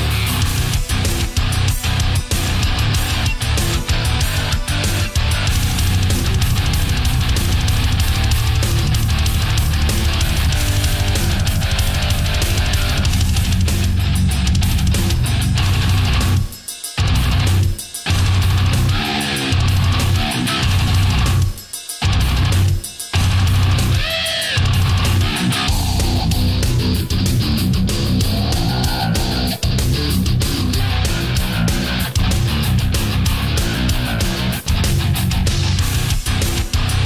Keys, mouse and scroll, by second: 0.3 a, 1.4 ctrl+z, 4.7 click, 6.9 right click, 7.8 shift+right click, 8.9-10.8 drag, 11.3 a, 15.7 Tab, 17.3 click, 18.0 click, 18.4 click, 19.5 click, 21.2-22.5 middle drag, 23.0 Tab, 23.6-25.8 middle drag, 27.7 right click, 31.1 click, 32.6-33.7 middle drag, 34.2 b, 34.9 click, 36.8-37.0 drag.